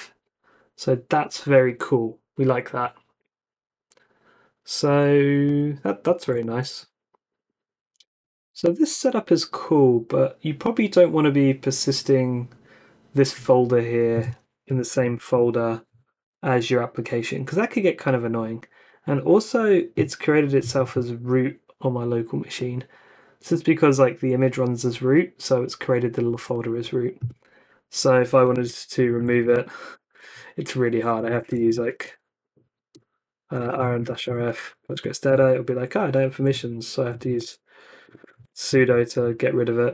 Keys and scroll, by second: 6.1 super+w, 14.4-15.6 typing, 28.3-29.7 typing, 29.9 Return, 30.9-35.3 typing, 36.2 Up, 36.5 alt+Left, 37.0-39.0 typing.